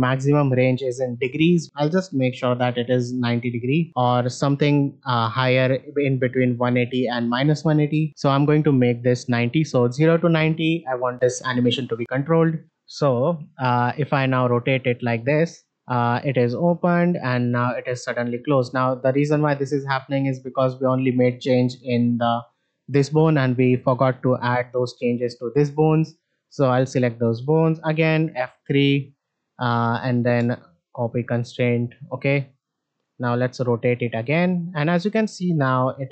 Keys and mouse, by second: 2.4-3.7 drag, 4.2-8.0 drag, 12.1 middle click, 13.5 middle drag, 20.3 shift+middle drag, 23.6 click, 24.4 click, 26.9 shift+click, 28.2 F3, 31.4 shift+middle drag, 32.5 click.